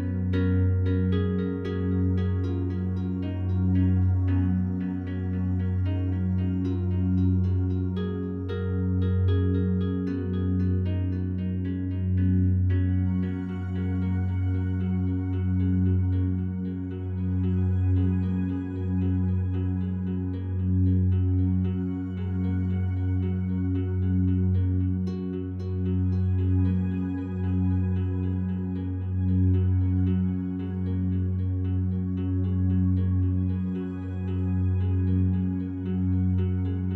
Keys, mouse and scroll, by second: 0.4 ctrl+alt+shift+click, 1.1 ctrl+alt+shift+click, 1.6 ctrl+alt+click, 2.4-3.6 ctrl+alt+drag, 3.7-5.0 drag, 5.1-7.1 drag, 7.3-8.7 drag, 8.8 click, 10.0 click, 11.0-12.2 drag, 12.3-13.4 drag, 13.5 click, 13.7-14.7 drag, 14.7 Delete, 15.7 click, 16.8 click, 16.9 click, 17.6 Delete, 18.1-19.5 drag, 19.5 click, 19.7 click, 20.4 click, 21.1 click, 21.4 click, 21.7 click, 22.2 click, 22.4 click, 23.0 click, 23.2 click, 23.6 click, 23.8 click, 24.0 click, 24.4-27.8 drag, 24.9-36.9 Delete, 28.0-31.0 ctrl+alt+drag, 31.6 alt+click, 32.7 ctrl+alt+click, 33.1 ctrl+alt+shift+click, 36.8-36.9 drag.